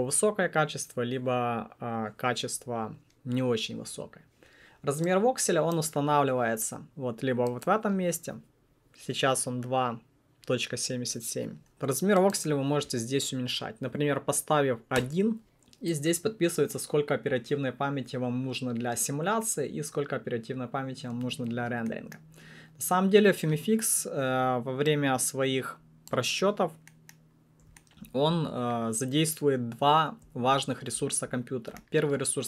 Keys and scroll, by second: 12.9 1, 14.9 Return.